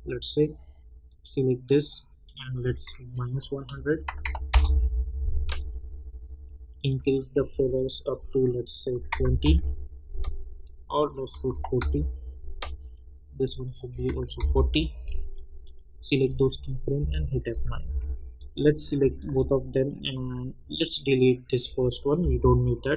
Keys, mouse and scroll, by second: 1.2 click, 4.5 Return, 6.8 click, 9.4 Return, 11.0 click, 11.7 Return, 13.5 click, 14.3 Return, 15.6-17.0 drag, 17.0 F9, 17.8 j, 18.3 click, 19.2 shift+click, 20.9 click.